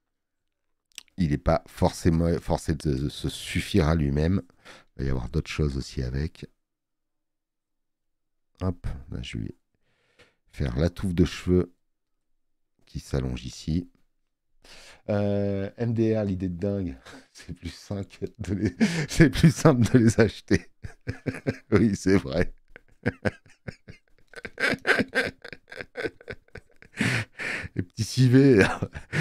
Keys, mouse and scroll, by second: 4.1 space, 4.3 click, 21.3 space, 21.5 click.